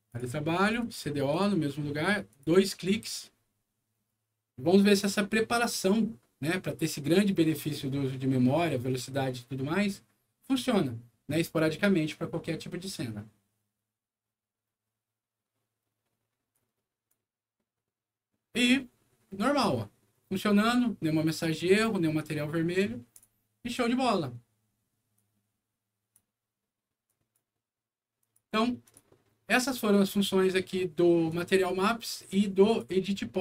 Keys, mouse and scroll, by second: 0.0 click, 0.6 click, 0.8 click, 1.3 click, 2.3 click, 2.5 click, 16.5 click, 20.1 scroll down 2, 20.8 scroll up 2, 23.1 click, 25.1-26.1 drag, 27.0 click, 28.2 click, 28.8 click, 31.2 click, 32.6 click.